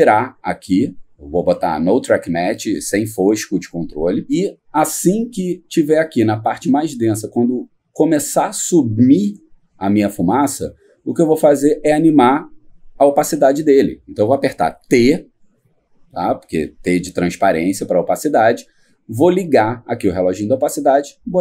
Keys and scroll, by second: 15.5 t.